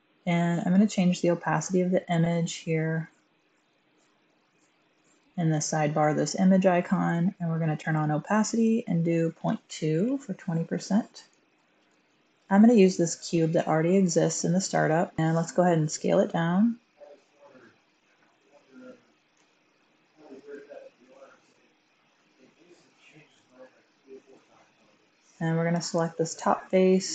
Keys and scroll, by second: 9.3 typing, 9.8 Return, 11.8 typing, 15.2 s, 19.3 g, 20.2 z, 22.9 typing, 23.2 Tab.